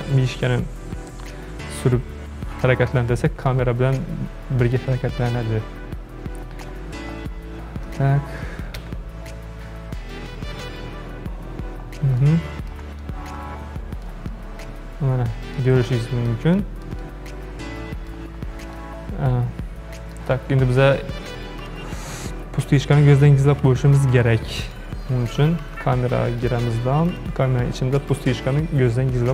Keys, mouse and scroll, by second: 0.6-1.1 scroll up 1, 1.1-5.0 shift+middle drag, 5.0-6.3 scroll up 24, 6.5 scroll down 5, 6.7-7.2 scroll up 8, 7.2 scroll down 1, 7.9 click, 8.8 KP_Decimal, 11.1 scroll up 1, 11.6-12.3 scroll up 8, 12.3-18.5 shift+middle drag, 18.5 scroll up 4, 18.8-21.7 shift+middle drag, 21.7 click, 24.6 drag, 26.4 click, 27.1 click, 28.1 click.